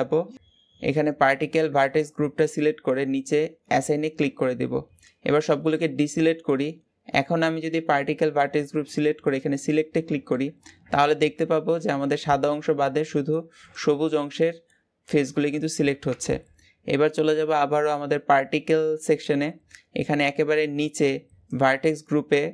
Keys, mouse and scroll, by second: 3.7-4.1 drag, 4.1-5.3 scroll down 2, 5.3 alt+a, 9.5 click, 10.1-11.7 middle drag, 11.7-13.3 scroll up 1, 13.3-15.9 scroll up 1, 15.9 Tab.